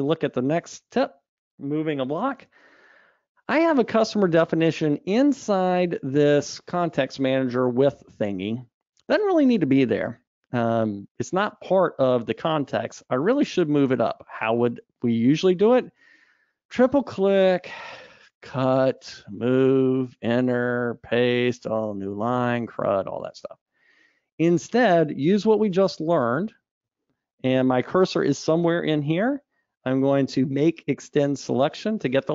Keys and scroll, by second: 18.9 super+x, 25.3 super+z, 26.0 super+z, 30.9 alt+Up.